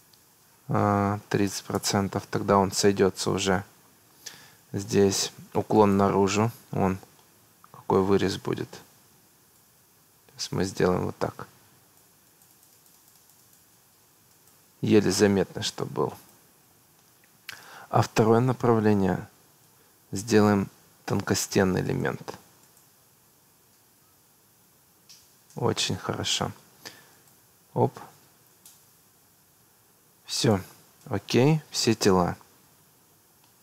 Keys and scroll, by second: 1.2 3, 1.5 0, 1.8 Return.